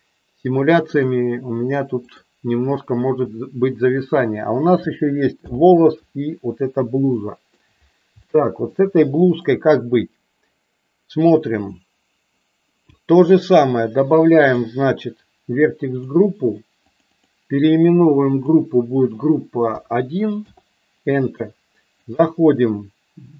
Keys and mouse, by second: 0.9 click, 5.3 alt+h, 7.0 shift+middle click, 8.2 shift+middle click, 9.4 click, 15.9 click, 16.8 click, 17.0-20.5 drag, 22.2-23.3 drag.